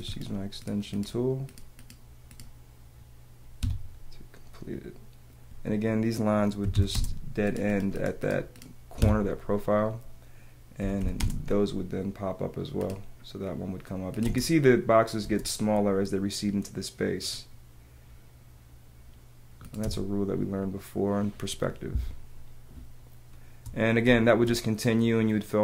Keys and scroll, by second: 0.0 space, 3.6 Escape, 6.6 t, 7.0 space, 7.8 space, 9.0 Escape, 10.8 p, 15.2 space, 19.8 space, 22.0 space, 24.0 space.